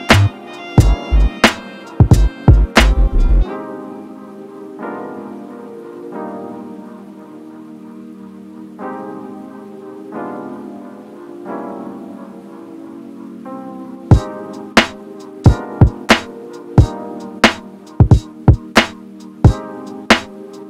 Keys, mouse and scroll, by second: 0.0 shift+middle click, 0.2 shift+click, 0.6 shift+middle click, 0.7 shift+click, 1.1-2.6 ctrl+shift+middle drag, 2.6-5.4 drag, 6.5-7.0 scroll up 1, 7.0-8.1 shift+middle drag, 8.1-12.7 drag.